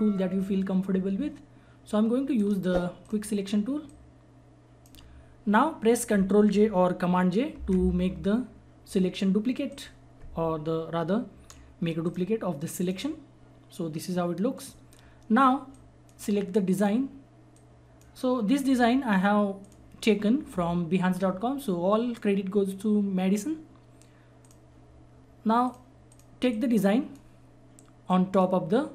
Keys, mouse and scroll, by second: 1.6 click, 2.4 right click, 3.0-7.6 drag, 7.5 ctrl+j, 9.7 click, 12.0-19.6 drag, 16.0-16.3 drag, 17.8 click, 24.4 click, 24.5-28.9 drag.